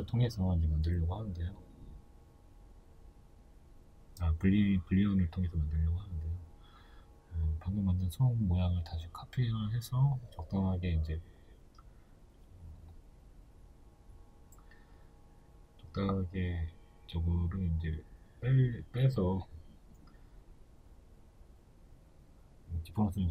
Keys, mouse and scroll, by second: 2.9 shift+d, 3.7 click, 4.1 s, 5.3 click, 5.6 g, 6.6 click, 6.9 s, 8.9 right click, 9.3 s, 12.1 click, 12.5 g, 14.0 shift+middle click, 14.3-14.6 scroll, 14.6 right drag, 15.0-16.6 middle drag, 16.6 right click, 17.5 s, 19.6 middle click, 19.9 right click, 21.6-23.3 drag.